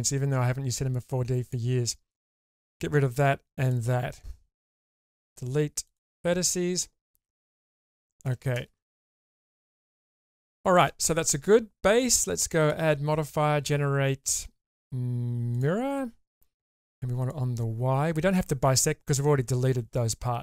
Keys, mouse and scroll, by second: 2.9 shift+click, 4.8 Delete, 7.1 Tab, 7.6-8.3 middle drag, 8.5 shift+space, 9.1 shift+middle click, 9.6 click, 10.5 shift+middle drag, 12.6-15.6 drag, 17.2 click.